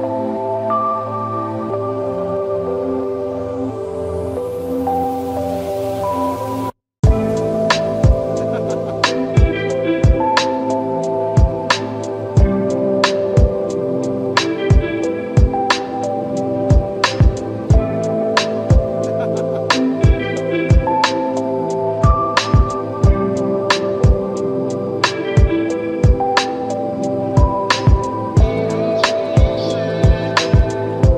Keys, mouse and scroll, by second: 0.2 alt+click, 1.1-2.1 alt+right drag, 2.5 click, 5.9-6.7 right drag, 7.9 click, 9.2-10.0 right drag, 11.6 click, 12.4 click, 13.8 click, 14.0 alt+right click, 14.5-14.9 alt+click, 14.8 alt+middle click, 15.0 alt+click, 15.7-16.4 right drag, 17.0 click, 20.0 click, 20.8-21.8 right drag, 22.1 click, 22.4 alt+right click, 22.7-23.2 alt+click, 22.9 alt+middle click, 23.5 click, 25.2-25.6 right drag, 30.5-30.9 scroll down 1, 31.1 alt+click.